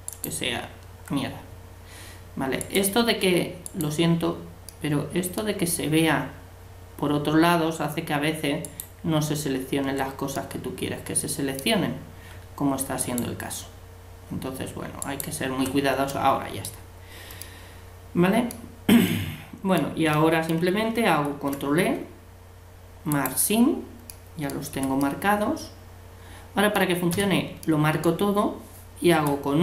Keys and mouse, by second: 0.1-1.8 right drag, 2.6-5.4 right drag, 5.0 click, 5.6 middle click, 8.6-10.3 right drag, 10.3-12.2 middle drag, 13.0-14.8 right drag, 15.0-16.7 right drag, 16.1 middle click, 23.2 ctrl+e, 24.7 a, 27.2 a, 29.1 u.